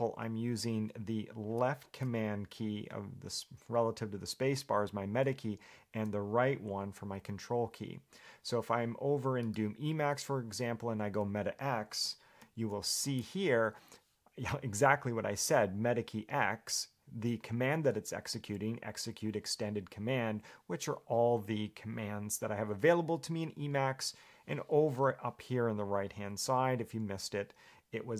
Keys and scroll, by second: 12.7 alt+x.